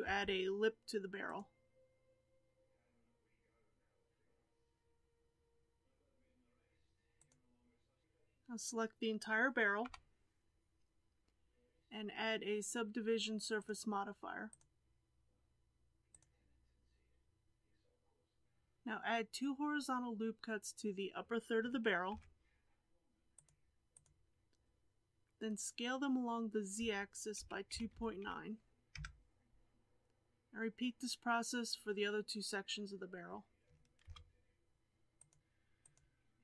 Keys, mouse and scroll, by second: 9.8 l, 13.5 click, 14.4-17.5 drag, 18.4 alt+a, 22.0 ctrl+r, 26.7 s, 34.0 ctrl+r.